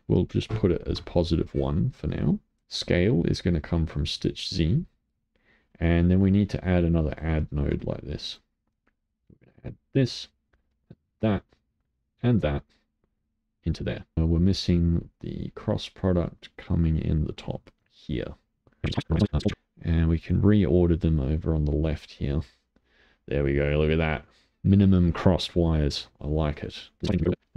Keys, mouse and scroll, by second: 2.0 middle click, 2.6 click, 5.2-6.4 middle drag, 6.4 click, 7.6 shift+d, 9.1-11.1 drag, 11.8-14.1 drag, 15.4 click, 18.8 middle click, 18.9 scroll down 4, 19.0 middle click, 19.1 click, 19.2 middle click, 19.3 click, 19.3 g, 19.5 middle click, 20.2-25.5 drag, 25.5-27.0 middle drag, 27.0-27.3 scroll down 4, 27.4 g.